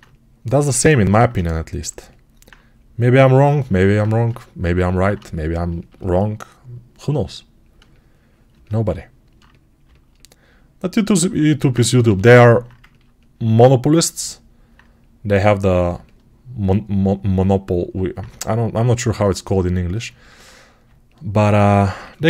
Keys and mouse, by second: 11.0-18.0 drag, 11.9 g.